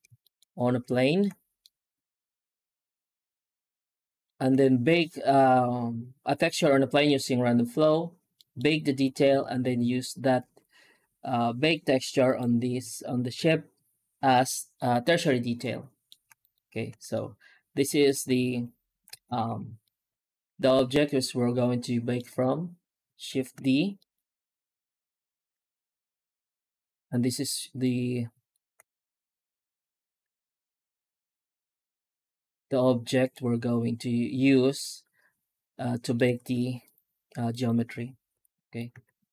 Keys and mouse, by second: 0.1 middle drag, 1.0 middle click, 1.5-4.1 middle drag, 8.2 middle drag, 12.1 right click, 15.5-16.0 alt+middle drag, 16.3 right click, 16.8 Tab, 17.0 middle click, 18.4 Tab, 19.2 ctrl+s, 19.7 shift+middle click, 20.3 Tab, 20.7 Tab, 20.9-22.0 middle drag, 23.2 shift+d, 25.5 shift+z, 27.7 middle click, 29.8 g, 33.8-35.7 middle drag, 35.8 middle click, 36.1 z, 37.4 right click, 38.2 h, 38.5 right click, 38.8 Tab.